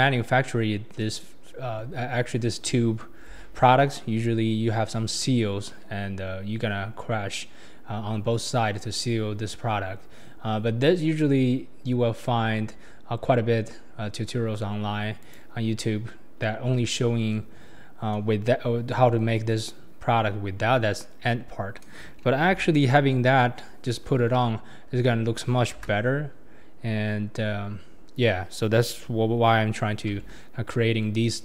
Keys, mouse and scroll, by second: 8.5-8.9 scroll down 4, 8.9 click, 8.9 middle click, 8.9 right click, 15.2 click, 15.9 scroll down 4, 16.6-17.0 scroll down 1, 17.0-17.6 scroll up 2, 19.0 scroll down 4, 20.5-22.1 scroll up 9, 22.6 h, 23.4 middle click, 23.4-24.2 scroll down 6, 24.4 KP_1, 25.0-25.3 scroll up 4, 25.8 KP_0, 26.7 scroll up 4, 27.4-28.2 scroll up 5, 30.1 ctrl+z, 31.2-31.4 scroll up 4.